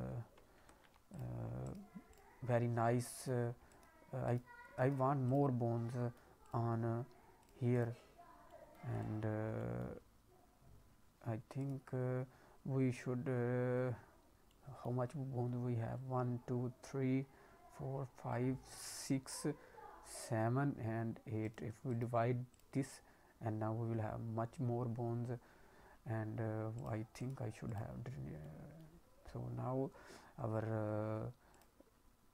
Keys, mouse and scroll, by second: 0.6 ctrl+z, 1.1 click, 1.6 right click, 2.5-3.1 scroll up 3, 3.1 click, 4.7 right click, 5.7 scroll down 1, 6.1 middle click, 6.4 click, 7.3 click, 7.7 click, 8.4 middle click, 8.9 click, 9.4 scroll down 2, 9.5 middle click, 9.9-10.7 scroll up 1, 11.6 right click, 14.4 middle click, 15.1-17.5 scroll up 2, 18.9 middle click, 21.9 right click, 26.7 click, 27.1 right click, 28.2 scroll down 1, 28.3 middle click, 31.5 click.